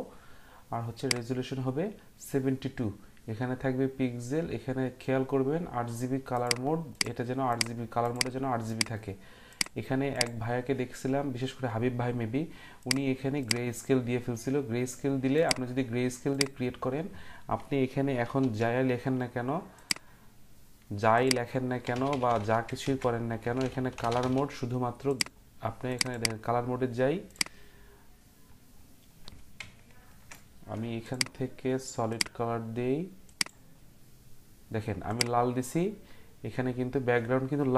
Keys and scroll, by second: 18.4 t, 21.7-24.7 typing.